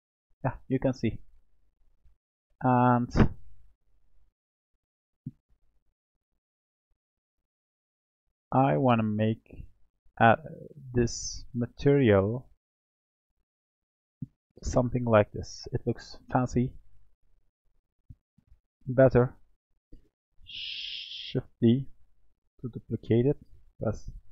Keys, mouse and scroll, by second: 1.1-3.1 middle drag, 3.1 click, 3.7-4.2 scroll down 1, 4.2-6.7 middle drag, 6.7 click, 7.3-8.1 scroll up 3, 8.1 click, 10.0 click, 10.9-14.0 drag, 14.6-15.3 scroll up 3, 15.3-15.8 scroll down 3, 15.8-17.2 middle drag, 17.2 click, 17.8-18.9 scroll down 3, 18.9 click, 21.9 shift+d.